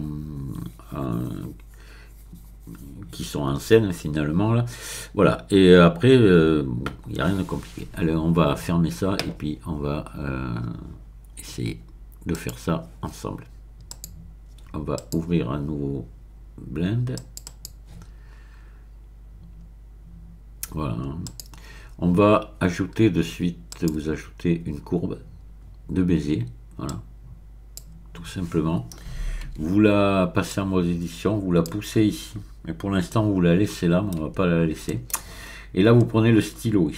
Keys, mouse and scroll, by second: 12.3 click, 13.9 click, 15.0 click, 17.1 click, 21.2 click, 23.7 click, 26.9-28.1 drag, 29.5 Tab, 30.5-32.2 drag, 33.1-34.2 shift+middle drag, 34.9-35.2 shift+scroll up 1.